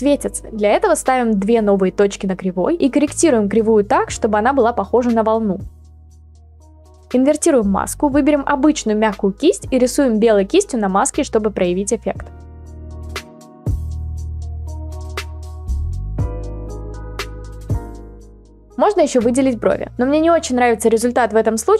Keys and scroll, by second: 13.0 ctrl+z, 13.6-14.7 [, 16.9 ctrl+z, 18.7-19.2 [.